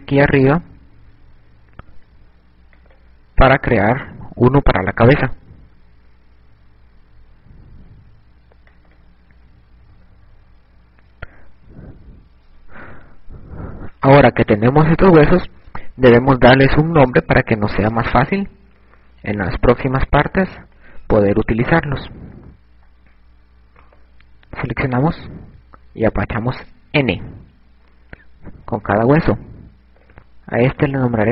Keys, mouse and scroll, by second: 3.7 click, 5.7 e, 9.3 click, 10.1-12.1 typing, 13.2 KP_2, 14.0 KP_8, 24.6 right click, 25.0 n, 29.6 click.